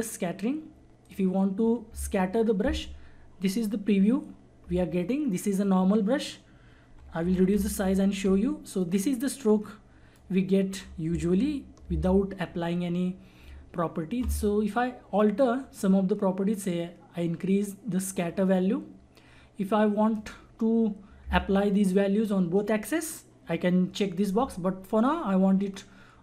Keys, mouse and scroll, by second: 6.8-8.2 typing, 9.1-11.8 drag, 11.8 ctrl+z, 18.1-22.8 drag, 25.6 click.